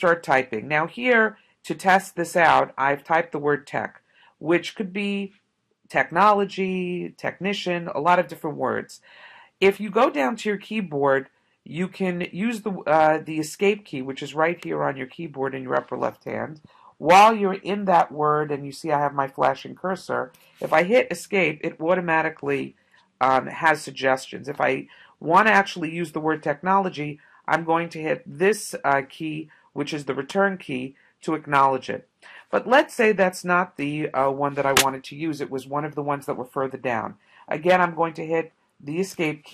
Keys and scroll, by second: 20.1 Escape, 30.3 Return, 32.7 BackSpace, 32.9 BackSpace, 33.5 BackSpace, 39.1 Escape.